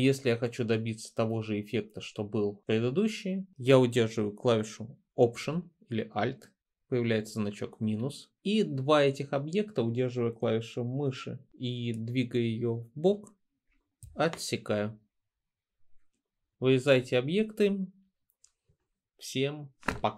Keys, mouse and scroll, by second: 16.5-17.0 drag.